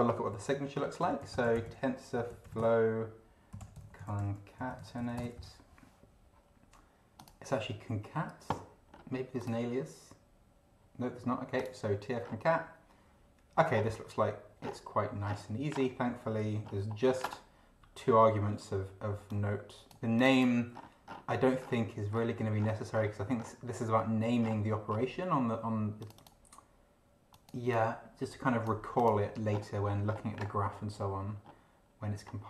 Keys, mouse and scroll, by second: 0.8-5.5 typing, 7.2 click, 9.4 click, 11.5 click, 12.2 scroll down 2, 13.7 scroll down 2, 14.6 scroll down 2, 15.2 scroll down 2, 16.1-16.4 scroll down 2, 16.6-17.1 scroll up 2, 19.3-20.6 drag, 20.7-21.3 scroll down 1, 21.6-23.6 scroll down 10, 24.4-25.1 scroll down 4, 26.0 click, 27.3 click, 28.0 click, 28.9 click, 29.5 scroll down 1, 30.0 scroll down 1, 30.8-31.1 scroll up 1, 31.4-32.1 scroll up 2, 32.2-32.4 scroll up 2.